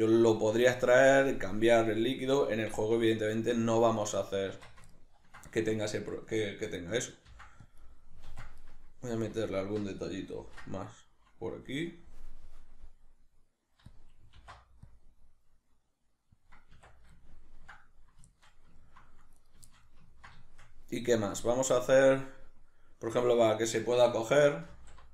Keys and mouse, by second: 4.0 right click, 4.5 Tab, 4.9-8.0 ctrl+middle drag, 7.3 ctrl+r, 8.0 right click, 8.2 ctrl+r, 8.7 right click, 9.5 alt+shift+right click, 10.4 ctrl+b, 14.0 click, 14.4 alt+e, 16.5 click, 16.8 Tab, 17.2-19.4 ctrl+middle drag, 19.4 right click, 19.7-25.1 shift+middle drag, 24.7 alt+q.